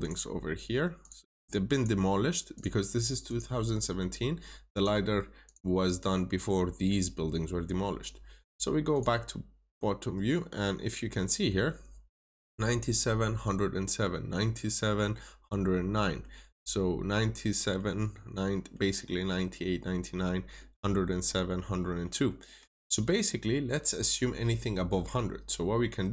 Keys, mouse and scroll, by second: 6.4-8.8 scroll up 1, 8.8 click, 10.1 scroll up 1, 11.1 middle click, 12.3 scroll down 1, 12.6 middle click, 13.3 scroll up 1, 13.7 middle click, 15.7 scroll down 1, 15.9 middle click, 16.3 scroll up 1, 17.4 middle click, 19.1-19.5 scroll down 2, 19.2 middle click, 20.0 scroll up 1, 20.5 middle click, 21.0 scroll down 1, 21.5 scroll up 1, 21.7-22.3 scroll down 2, 21.9 middle click, 22.9 middle click, 23.2 scroll down 1, 24.5 middle click.